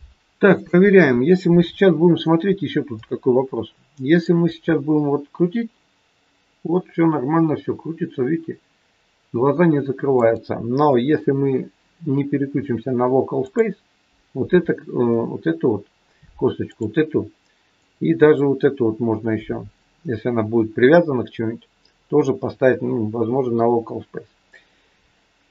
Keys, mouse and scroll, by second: 0.5 click, 2.5-2.8 scroll up 1, 2.9 middle click, 4.4 r, 13.4 click, 16.6 click, 17.7 click, 23.5 middle click.